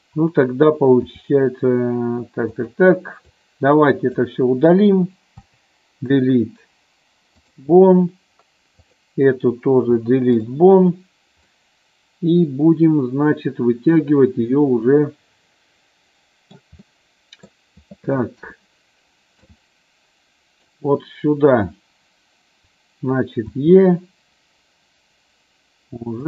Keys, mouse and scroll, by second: 1.2 r, 2.7 click, 3.4-4.5 drag, 5.5 Delete, 9.1 click, 10.0 Delete, 11.7-16.7 middle drag, 17.0 middle click, 18.6 KP_1, 19.7 middle click, 23.7 e.